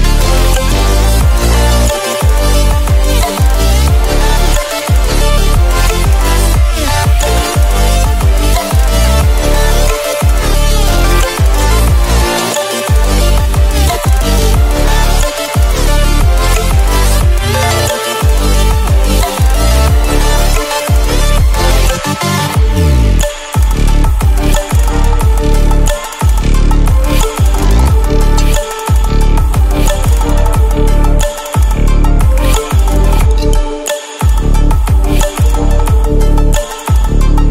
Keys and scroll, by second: 13.0 ctrl+-, 13.9 ctrl+-.